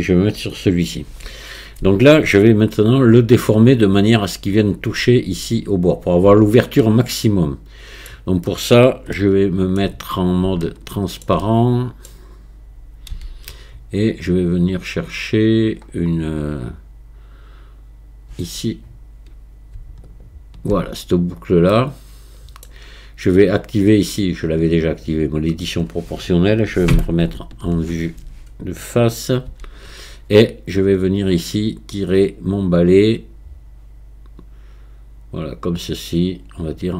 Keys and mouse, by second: 6.3 Tab, 6.8 middle click, 7.2 click, 9.3 shift+click, 10.6 shift+click, 11.5 middle click, 13.2 z, 20.2 alt+click, 21.8 middle click, 27.3 ctrl+KP_1, 29.5 z, 31.4 click.